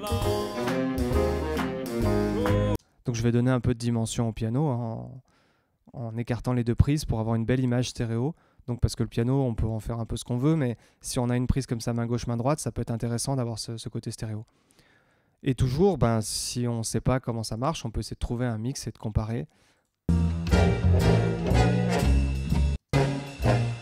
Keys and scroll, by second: 2.7 space, 5.1 Tab, 20.0 space, 22.7 space.